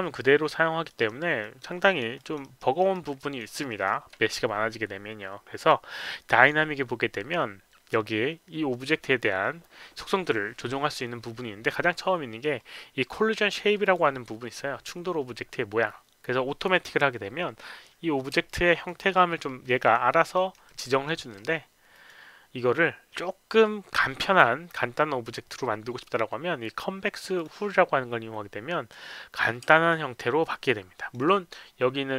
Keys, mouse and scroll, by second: 0.9 alt+right click, 1.4 alt+click, 1.8 alt+middle click, 2.2 alt+click, 2.4 alt+right click, 2.8 alt+middle click, 3.2 alt+click, 3.6 alt+middle click, 6.4 click, 13.8 click, 18.5 alt+click, 19.0 alt+middle click, 20.3 alt+middle click, 20.7 alt+right click, 21.0 alt+middle click, 21.9 click, 27.4 click, 29.9-31.1 alt+drag.